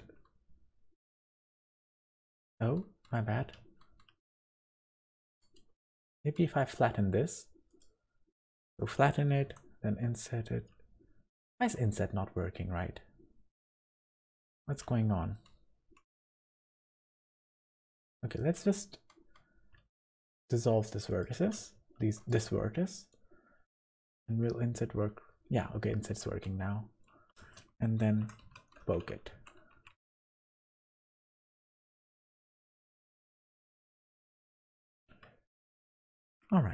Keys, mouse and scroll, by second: 2.7-3.1 scroll down 2, 3.6 ctrl+z, 3.6 scroll down 1, 5.0 click, 5.8 scroll up 1, 6.0 right click, 8.5-8.8 scroll up 2, 9.5 i, 14.5-15.0 scroll down 3, 14.7 middle click, 16.2 1, 17.2 click, 17.6 scroll up 2, 18.4 right click, 19.9 x, 22.0 3, 22.2 click, 22.5 middle click, 24.3 i, 26.4 middle click, 27.4 space, 29.3 Tab, 29.7 Tab, 29.9 1, 30.2 click, 30.6 g, 32.4 Tab, 32.7 scroll down 2, 33.0 click, 33.4-33.7 scroll down 3, 33.7 middle click, 34.1-34.9 scroll up 5, 34.9 shift+middle click, 35.7 click, 36.1 click.